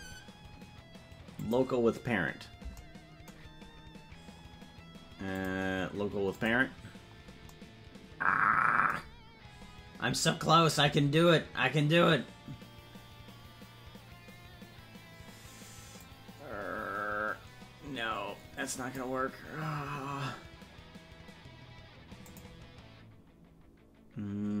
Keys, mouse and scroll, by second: 3.9 scroll down 2, 5.3-6.5 drag, 5.3 scroll down 1, 16.0-19.0 drag, 22.2-24.6 drag.